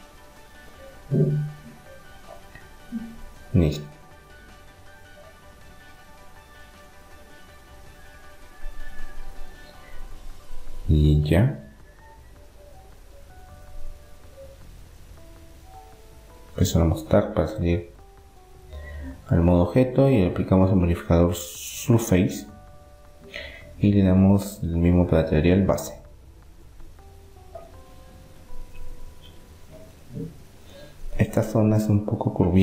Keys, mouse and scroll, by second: 1.9 ctrl+r, 9.7 middle click, 10.7-12.0 middle drag, 12.0-13.7 right drag, 13.7-15.4 middle drag, 15.4 Tab, 16.7-18.4 drag, 20.6-21.7 middle drag, 21.7-26.3 drag, 27.1 Tab, 28.0 middle click, 31.6-32.6 middle drag.